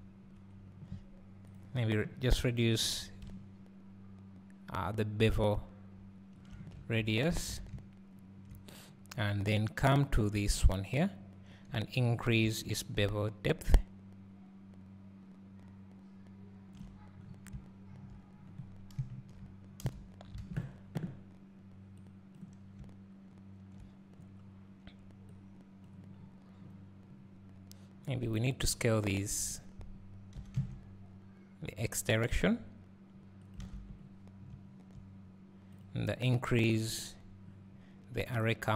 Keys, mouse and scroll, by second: 3.4-9.3 drag, 7.2 scroll down 1, 7.5 alt+a, 7.7 `, 13.3-28.4 shift+drag, 17.3 scroll up 1, 18.1 scroll down 1, 19.1 KP_0, 20.5 alt+a, 21.1 a, 22.7 scroll up 1, 24.2-25.3 scroll down 1, 26.2 scroll up 1, 28.8-29.6 scroll down 2, 30.3 s, 33.7 alt+a, 34.1-34.5 scroll up 2, 35.9 click, 37.1 click.